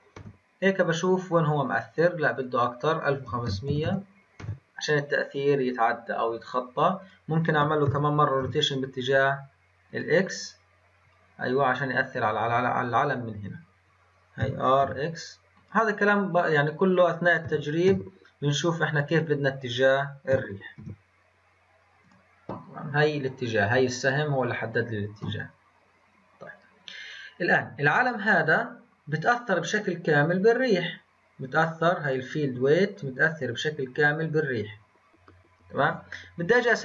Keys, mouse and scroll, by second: 2.3-3.8 drag, 3.8 KP_0, 7.0 click, 7.8 r, 14.4 r, 20.3 r, 23.8-25.2 scroll up 2, 25.2 n, 26.1-26.5 scroll down 2, 28.0 click, 30.1-32.0 scroll down 12, 32.0-32.4 drag, 32.4-35.8 scroll down 8.